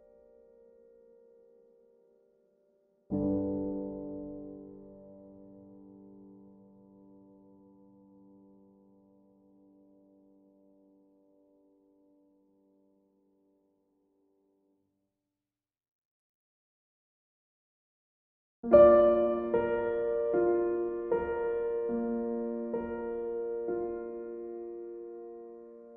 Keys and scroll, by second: 7.5 ctrl+z, 9.9 Delete, 10.4 ctrl+s, 10.7 ctrl+d, 19.0 b.